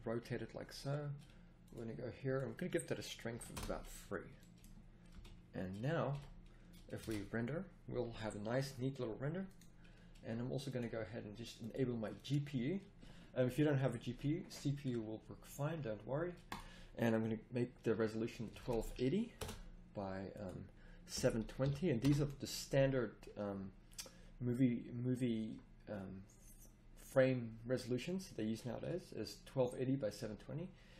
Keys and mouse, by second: 5.1 KP_0, 6.1 a, 7.1 shift+z.